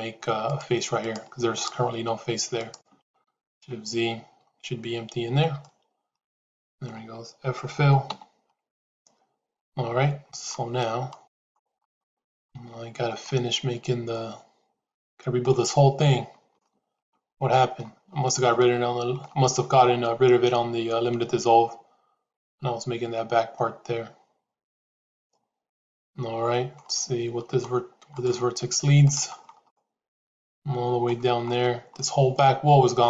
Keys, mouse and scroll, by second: 0.9 shift+click, 1.4 shift+click, 2.4 shift+click, 5.0 shift+z, 5.5-6.8 middle drag, 8.1 f, 8.6-10.5 middle drag, 11.2 click, 11.7 middle click, 12.7 shift+z, 13.1-15.4 middle drag, 16.5 shift+middle click, 17.3 middle click, 18.5 shift+middle click, 19.9-26.7 middle drag, 29.6-31.0 middle drag, 31.9-33.0 middle drag.